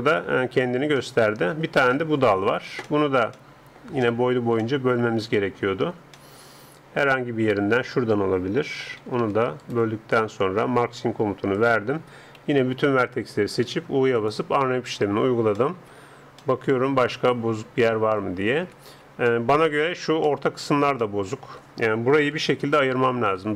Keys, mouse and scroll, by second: 1.0-6.8 middle drag, 6.8-7.8 drag, 7.8 middle click, 8.6 a, 9.6-11.4 right drag, 11.6-13.6 drag, 12.4 a, 12.7 a, 13.6 u, 15.8-23.0 middle drag, 22.4 a, 23.0 c.